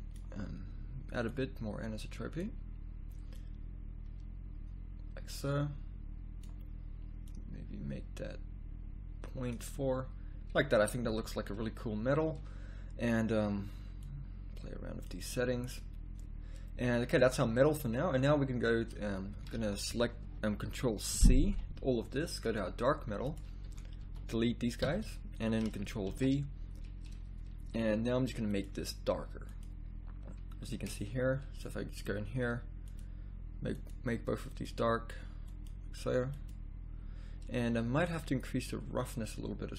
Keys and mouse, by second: 17.2 z, 17.3 z, 22.4 ctrl+c, 22.4 a, 31.0 shift+z.